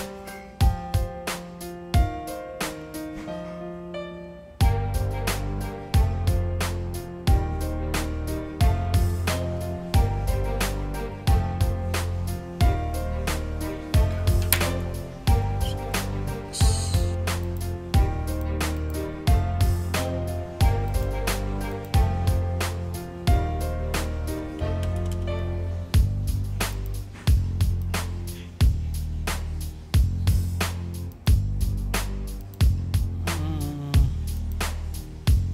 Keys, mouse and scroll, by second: 10.7 click, 17.4 click, 18.3 click, 18.7 click, 20.8 click, 21.7 click, 26.7 click, 27.8 click, 31.1 click, 32.4 click, 34.3 click.